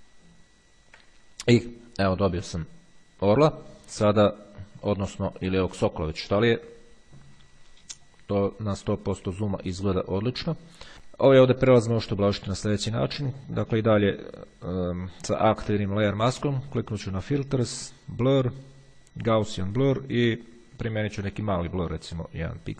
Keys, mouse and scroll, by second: 0.2-1.2 ctrl+scroll down 1, 9.6-10.2 ctrl+scroll up 2, 10.8 click, 11.0 ctrl+scroll up 2, 13.7 click, 17.2 click, 19.5 click.